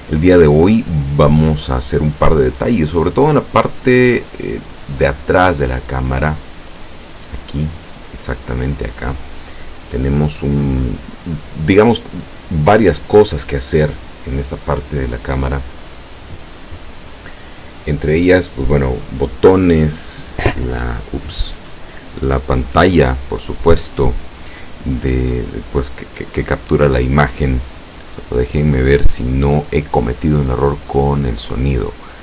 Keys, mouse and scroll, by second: 0.7 middle click, 4.8-7.4 middle drag.